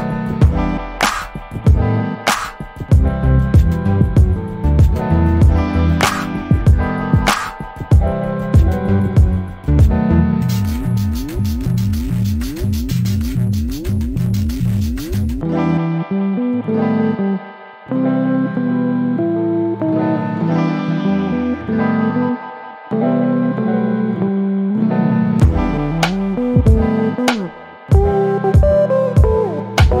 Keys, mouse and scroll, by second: 9.6 double click, 9.9 scroll down 1, 10.2 alt+click, 11.2 middle click, 12.3 alt+scroll up 2, 12.9 alt+middle click, 14.1 click, 15.9 scroll down 1, 16.8-17.1 scroll up 1, 17.4 click, 18.0-18.5 scroll up 1, 18.6 alt+middle click, 20.5 click, 22.8 1, 22.9 Return, 23.7-24.0 scroll up 1, 24.0 alt+middle click, 25.0 click, 28.7 scroll up 1, 29.3 alt+middle click.